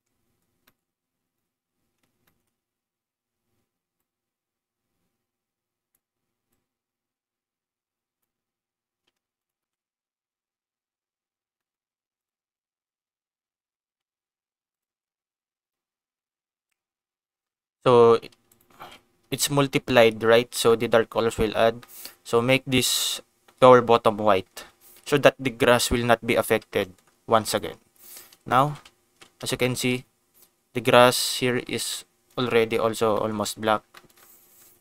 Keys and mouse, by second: 0.6 middle click, 2.2 shift+middle click, 3.9-5.9 drag, 6.5-8.3 drag, 9.3 ctrl+shift+click, 11.6 click, 14.7 ctrl+shift+click, 18.5 ctrl+shift+click, 20.7 shift+middle click, 21.8 shift+middle click, 26.7 middle click, 27.4 click, 28.5 ctrl+shift+click, 29.1 ctrl+s, 29.6 shift+middle click, 31.9 shift+middle click, 33.2 middle click, 33.9 middle click.